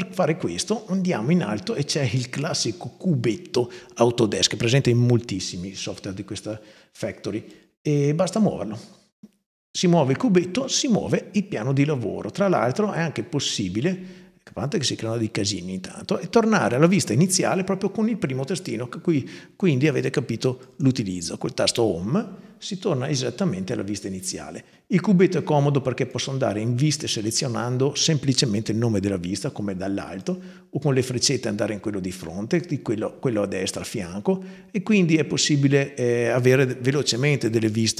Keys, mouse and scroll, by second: 7.3-7.9 drag, 20.4 click, 25.9 click, 30.0 click, 31.9 click, 33.5 click.